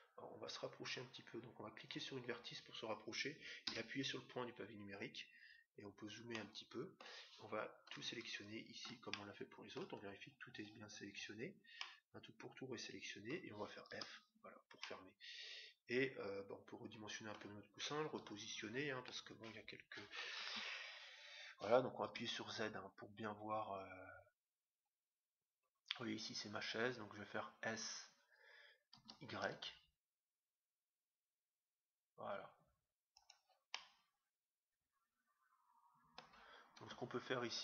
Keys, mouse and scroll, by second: 0.1 scroll up 1, 0.4-2.5 scroll down 1, 2.5-3.8 right drag, 4.8-5.9 scroll up 1, 5.9-6.3 scroll down 1, 6.3-7.9 middle drag, 8.3-10.0 right drag, 9.1-10.8 middle drag, 10.8-11.7 scroll down 1, 11.7-13.4 middle drag, 13.5 middle click, 13.9 f, 14.8-16.5 middle drag, 18.1 KP_7, 20.4 Tab, 22.0 z, 24.3-27.2 middle drag, 29.0 s, 33.6-35.4 middle drag, 36.8 Tab.